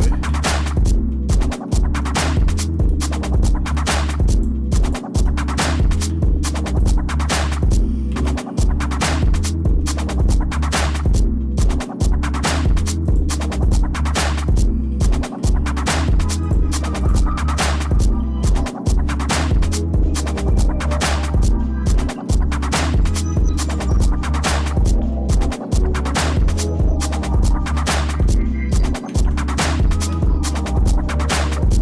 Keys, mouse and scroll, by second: 0.2 j, 1.1 shift+middle click, 1.7 middle click, 2.2 shift+middle click, 2.8 middle click, 4.3 click, 4.8 shift+click, 5.9 j, 6.8 click, 7.2 shift+click, 8.2 j, 8.7 scroll down 2, 8.8 scroll up 1, 8.9 scroll down 1, 9.2 shift+scroll up 1, 9.5 shift+middle click, 10.2-10.9 scroll up 3, 11.1 shift+middle click, 11.9 middle click, 13.0 click, 13.6 shift+click, 15.2 j, 16.4 click, 17.0 shift+click, 18.4 j, 20.7 scroll down 1, 21.3 shift+middle click, 22.2 middle click, 22.9 shift+middle click, 23.7 middle click, 24.1 middle click, 24.5 middle click, 24.9 middle click, 25.3 Tab, 25.7 middle click, 26.3 shift+middle click, 26.8 scroll down 1, 27.2 middle click, 27.7 shift+middle click, 29.0 ctrl+d, 29.7 shift+middle click, 31.0 shift+middle click.